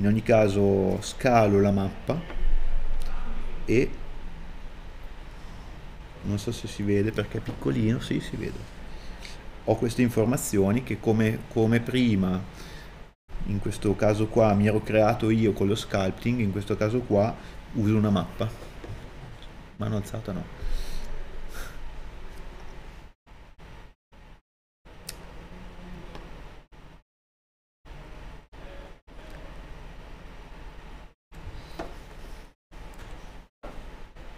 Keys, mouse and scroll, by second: 0.0 KP_Enter, 4.7 scroll up 1, 6.0 middle click, 22.9 scroll down 1, 23.3 middle click, 28.0 click.